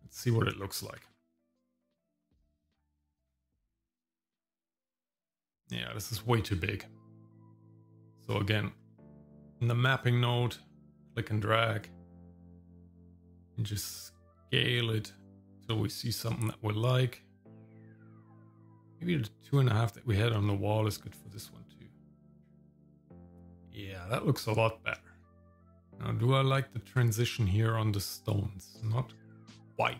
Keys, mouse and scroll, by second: 2.7 click, 4.8 middle click, 6.5 scroll down 1, 7.4 middle click, 7.9-8.5 scroll up 3, 8.5 middle click, 9.0-9.6 scroll up 1, 9.6 middle click, 11.0-23.3 drag, 24.3 scroll up 1, 25.3 scroll up 1, 25.5 scroll down 1, 25.6 shift+middle click, 25.7 scroll up 2.